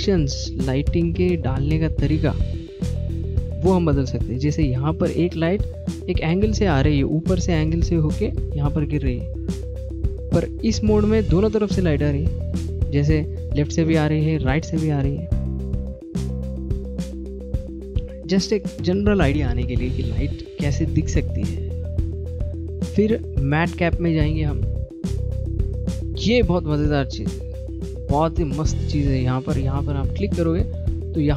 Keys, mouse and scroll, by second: 13.5 middle click, 18.9 click, 27.5 middle click, 29.7 click, 30.8 Left.